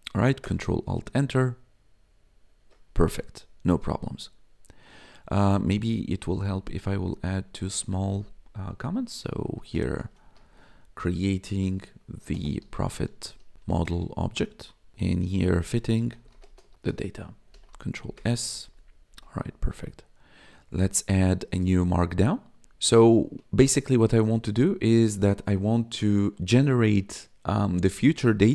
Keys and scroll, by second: 0.4 ctrl+alt+Return, 5.2 Up, 5.3 Left, 6.0 ctrl+Left, 6.8 Return, 7.2 Up, 7.7 ctrl+/, 9.1-17.3 typing, 14.9 ctrl+/, 17.5 ctrl+s, 18.0 Down.